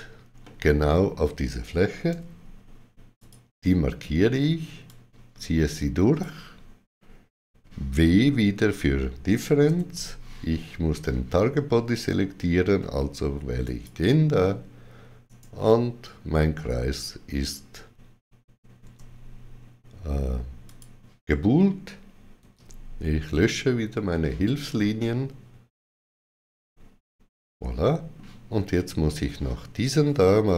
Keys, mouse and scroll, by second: 0.3 middle click, 2.0 middle click, 2.0 3, 3.1 click, 4.8 click, 4.8 3, 9.5 w, 9.6 click, 13.5 click, 15.1 right click, 18.7 Tab, 20.5 click, 22.3 x, 24.8 middle click.